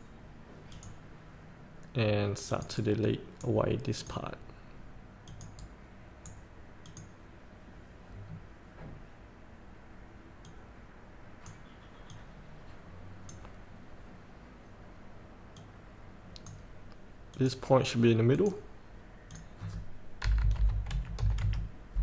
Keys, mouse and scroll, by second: 0.9 click, 3.0 right click, 4.2 click, 5.8 right click, 7.0 click, 8.4 scroll down 1, 10.6-19.5 drag, 20.5 KP_8, 21.1 KP_Decimal, 21.4 KP_5.